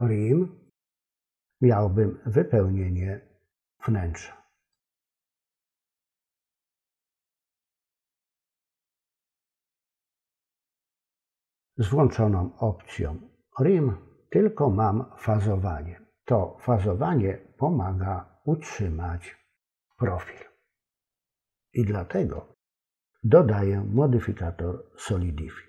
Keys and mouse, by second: 0.7 click, 4.8-6.8 drag, 8.5 click.